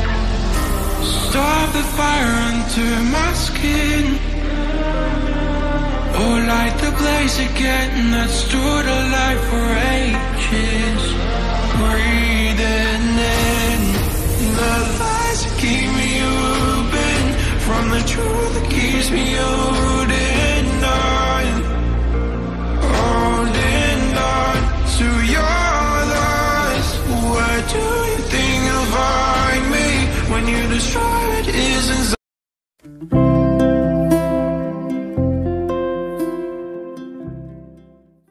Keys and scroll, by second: 7.0 ctrl+z.